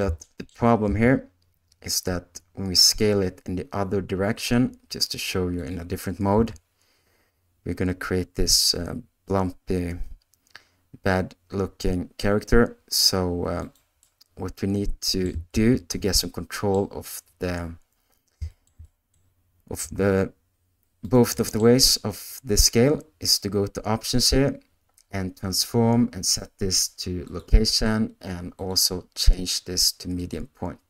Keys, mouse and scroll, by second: 0.2 shift+middle click, 0.8 s, 5.5 click, 6.3 s, 14.0-15.2 middle drag, 15.6 ctrl+z, 16.1 middle click, 18.5 shift+middle click, 18.8 middle click, 19.7 s, 21.3 middle click.